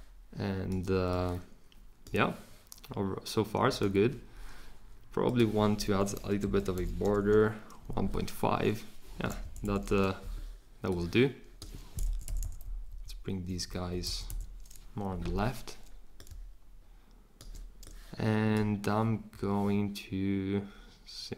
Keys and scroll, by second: 6.4 Right, 6.7 ,, 7.0 5, 7.1 Return, 9.1 Escape, 9.4 Left, 9.6 Left, 12.0 Left, 12.2 Left, 12.4 Left, 12.6 Down, 12.9 Down, 13.5 Up, 13.7 Up, 14.0 Left, 14.3 Left.